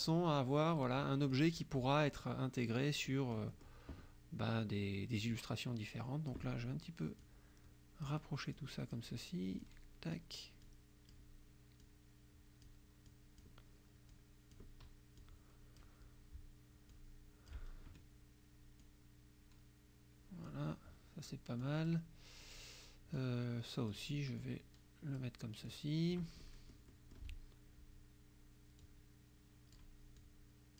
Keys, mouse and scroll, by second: 0.1 click, 1.3 click, 3.1 click, 5.2-6.6 drag, 7.3 click, 8.6 click, 9.6 click, 10.7 click, 11.8 click, 13.1 click, 14.2 click, 15.3 click, 17.0 click, 18.9-20.7 drag, 21.7 click, 23.2 click, 24.4 click, 25.7 click, 26.5 click, 28.8-30.0 drag, 30.2 click.